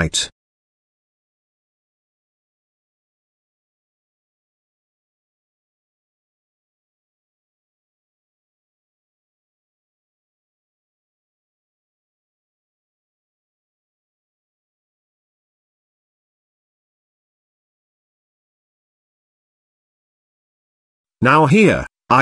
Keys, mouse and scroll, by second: 2.3-3.9 drag, 6.7 click, 7.9-8.2 middle drag, 8.5 g, 9.8-10.3 middle drag, 11.0-11.4 middle drag, 11.9-12.8 scroll up 1, 12.8-13.5 scroll up 1, 13.5 scroll up 1, 14.4-15.0 scroll up 2, 15.3 g, 16.8 middle click, 18.0 g, 22.1 Tab.